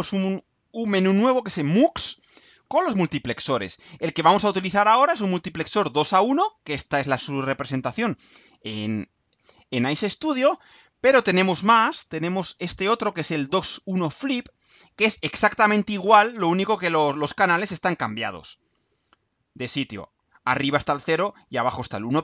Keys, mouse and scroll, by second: 4.7 click, 7.6 click, 9.0 ctrl+scroll up 2, 9.8-10.6 ctrl+drag, 14.4 click, 15.9 click.